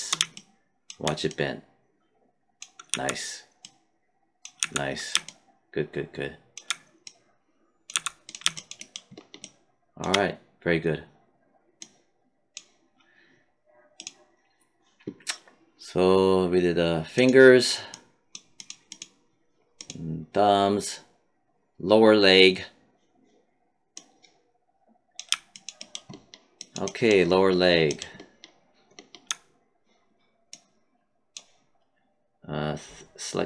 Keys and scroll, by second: 2.8 z, 4.5 z, 7.8 z.